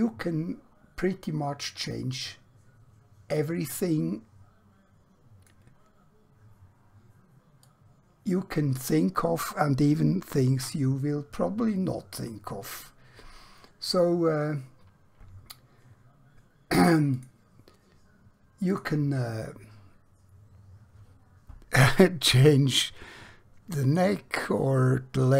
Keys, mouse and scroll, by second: 17.7 click, 23.8 click.